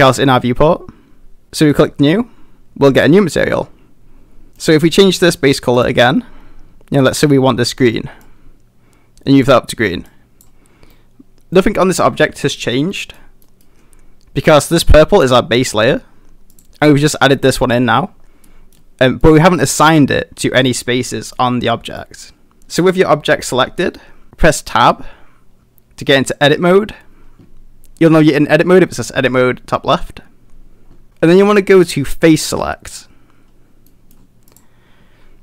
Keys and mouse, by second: 1.8 click, 4.5 middle click, 10.9-11.5 middle drag, 12.6-13.1 middle drag, 13.4 middle drag, 14.7 click, 16.5 click, 18.4 middle drag, 19.2 middle click, 20.8-21.3 middle drag, 22.0 middle click, 32.3 click, 33.9 middle click.